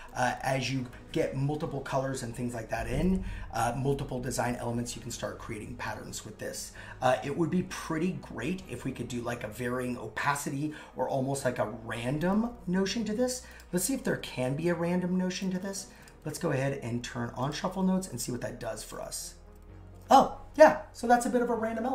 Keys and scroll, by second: 14.1 super+z.